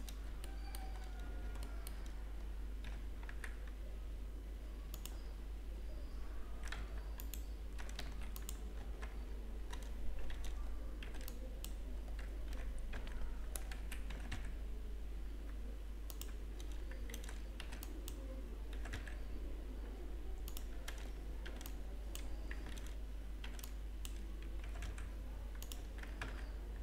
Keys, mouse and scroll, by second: 0.5 shift+middle click, 1.3-2.8 scroll up 6, 2.8 shift+middle click, 2.8-3.2 scroll up 1, 5.1 g, 6.8 Tab, 7.3 right click, 10.2 Tab, 10.2 click, 10.2 a, 11.1 b, 12.7 g, 15.5 g, 16.6 a, 17.2 alt+a, 17.6 b, 19.2 g, 21.4 a, 21.7 b, 22.8 alt+a, 23.5 b, 26.1 Tab, 26.1 g, 26.4-26.8 scroll down 3, 26.4 z.